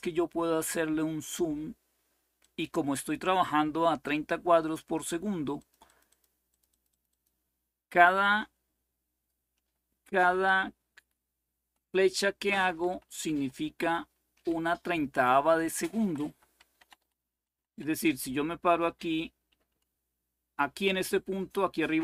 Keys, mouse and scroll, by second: 2.1-4.8 drag, 5.3-7.2 drag, 10.0 Left, 11.3-15.2 typing, 16.5-17.1 typing, 19.2 Left, 19.4 Left.